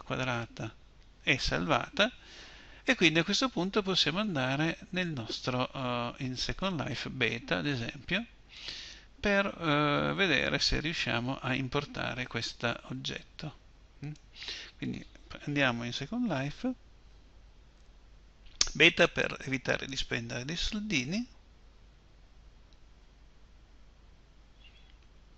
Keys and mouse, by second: 0.0 Return.